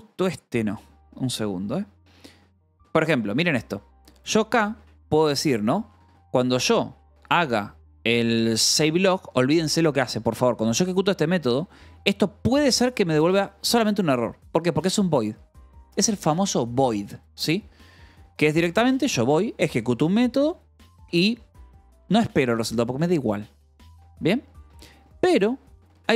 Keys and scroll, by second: 0.0-5.3 typing, 6.7-8.6 typing, 8.5 Escape, 10.6 l, 11.6 Escape, 12.7 h, 13.4 l, 14.3 shift+k, 14.5 Escape, 14.8 l, 18.0 h, 18.9 v, 19.5 e, 19.9 Escape, 20.3 h.